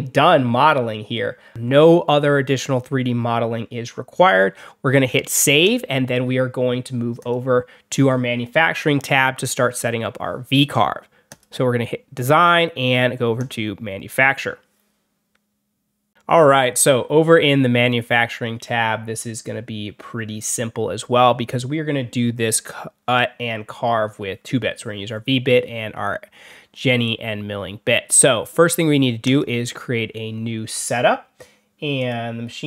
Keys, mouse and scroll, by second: 5.5 click, 7.1 click, 11.2 click, 13.3 click, 16.0 click, 29.1 click, 31.9 click.